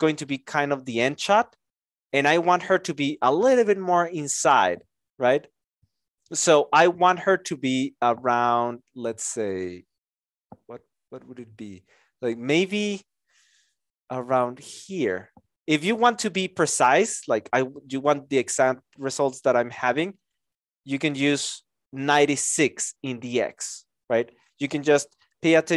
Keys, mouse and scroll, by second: 2.1 shift+click.